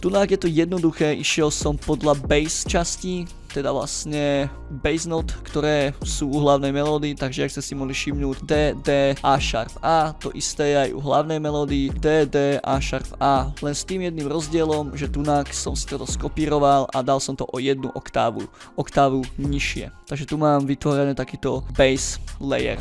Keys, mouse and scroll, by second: 0.0 scroll up 2, 1.4 click, 1.7 scroll down 2, 2.1 click, 3.1 click, 3.8 scroll up 2, 4.3 click, 4.8 click, 5.3 click, 8.3 click, 8.4 click, 9.4 click, 10.0 click, 10.9 click, 11.3 scroll up 2, 11.9 click, 11.9 drag, 12.4 click, 12.7 drag, 13.2 scroll down 2, 14.4 click, 14.9 click, 16.0 click, 16.3 click, 17.1 click, 18.1 click, 18.8-19.2 drag, 19.4 click, 20.0 scroll up 2.